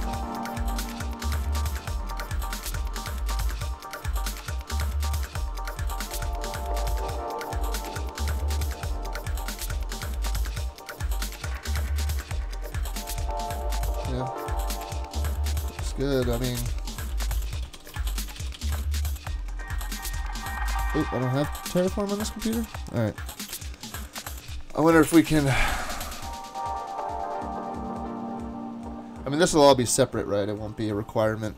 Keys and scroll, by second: 15.9 super+Tab, 17.0-19.1 typing.